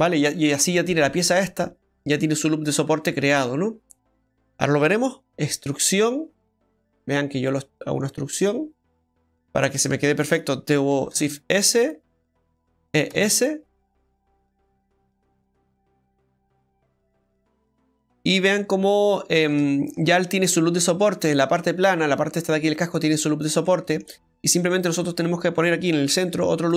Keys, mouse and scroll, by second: 0.1 scroll down 1, 3.3-4.1 scroll down 3, 4.1 middle click, 5.2 alt+shift+right click, 5.2 e, 9.3 ctrl+z, 9.3 middle click, 9.6 scroll down 2, 9.8 middle click, 11.1 shift+s, 12.1 middle click, 12.9 e, 18.0 middle click, 18.0-18.5 scroll up 1, 18.6 Tab, 18.9 middle click, 19.6 shift+middle click, 20.1-20.5 scroll up 2, 20.8 Tab, 21.0 middle click, 24.3 middle click, 24.3-24.8 scroll up 1, 26.2 ctrl+r.